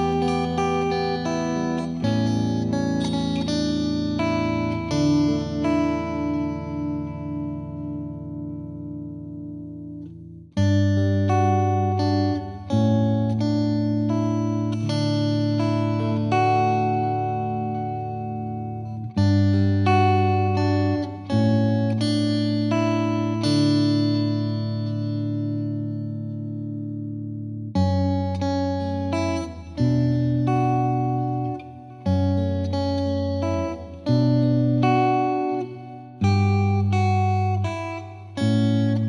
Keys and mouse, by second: 2.5 click, 2.7 click, 5.5 click, 6.5 typing, 8.4 click, 9.0 click, 9.3-10.0 typing, 11.2-12.2 drag, 13.2-14.5 drag, 15.9 click, 18.2 click, 19.8 click, 22.4 ctrl+click, 25.6 click, 27.7 click, 30.1 ctrl+click, 33.2 ctrl+click, 34.1 ctrl+click, 37.2 click.